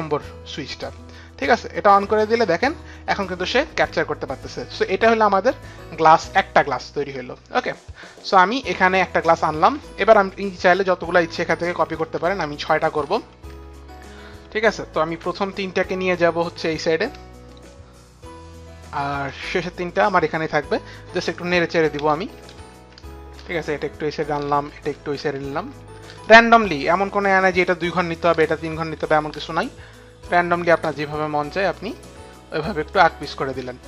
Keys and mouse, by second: 1.5 click, 6.2 click, 11.5 ctrl+d, 12.0 ctrl+d, 12.5 ctrl+d, 13.0 ctrl+d, 13.4 ctrl+d, 17.1 ctrl+d, 17.1 click, 19.9 click, 22.0 shift+Right, 22.2 shift+Right, 22.4 shift+Right, 22.6 shift+Right, 24.0 click, 24.5 shift+Left, 25.0 shift+Left, 25.8 shift+Right, 27.6 click, 28.4 shift+Left, 29.0 shift+Left, 30.9 shift+Right, 31.3 shift+Right, 31.6 shift+Right, 32.2 shift+Right.